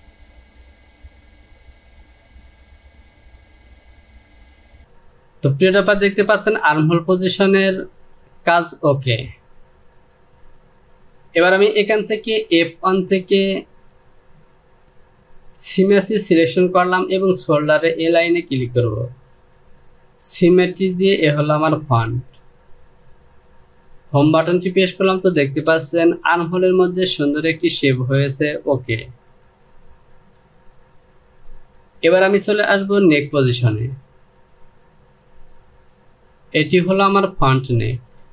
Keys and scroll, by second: 23.8 Home, 30.0 ctrl+z, 32.6 Return.